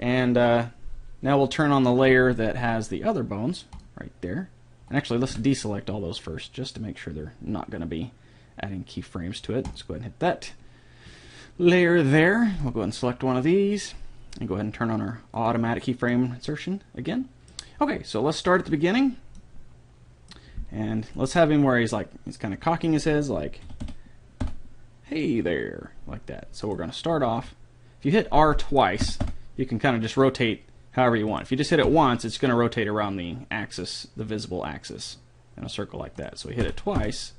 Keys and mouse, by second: 3.8-6.7 drag, 5.3 a, 9.7-11.4 drag, 12.6-14.4 right drag, 15.4-17.3 drag, 16.1-17.9 middle drag, 16.1-17.3 right drag, 18.5-20.4 drag, 19.5 middle click, 21.2-23.0 right drag, 23.1 r, 27.2 r, 28.6 middle click, 29.0 r, 31.8 r, 36.6 r.